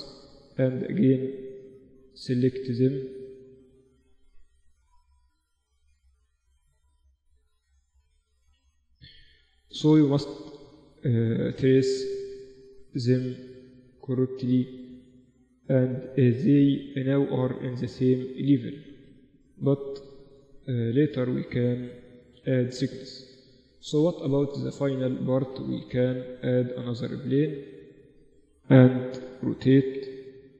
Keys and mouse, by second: 0.2-2.3 right drag, 0.8-2.7 drag, 2.8 middle click, 2.9-4.0 right drag, 5.9 click, 7.2 click, 8.6 middle click, 8.8 right click, 8.9 g, 10.6 g, 12.0 g, 13.0 g, 15.8 g, 17.9 g, 18.9 Tab, 19.7 Tab, 20.3 Tab, 21.0 Tab, 21.4 Tab, 24.7-26.2 middle drag, 26.2-27.8 drag, 26.4 shift+a, 29.0 r.